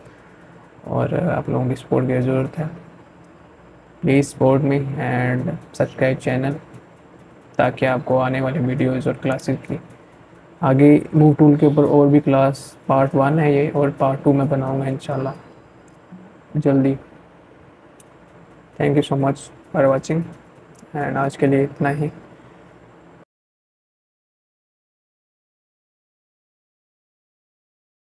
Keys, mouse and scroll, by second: 7.1 click.